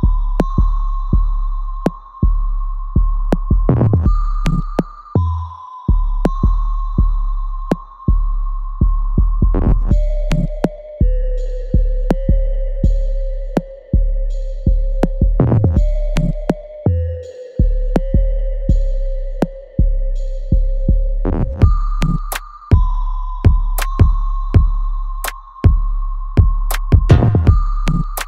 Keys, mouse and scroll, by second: 1.6 alt+right click, 1.9 alt+click, 2.5 alt+middle click, 3.0 alt+click, 3.5 alt+right click, 5.5 shift+click, 7.0 shift+click, 7.9-10.1 alt+drag, 10.1 alt+right click, 10.4 alt+click, 10.9 alt+middle click, 11.4 alt+right click, 12.5 shift+click, 13.1 alt+right click, 13.4-16.9 alt+drag, 16.9-18.7 alt+right drag, 18.7 alt+middle click, 19.2 alt+right click, 19.6-21.5 alt+drag, 21.5 alt+right click, 22.0 alt+middle click, 23.2 click, 25.0-28.2 ctrl+drag.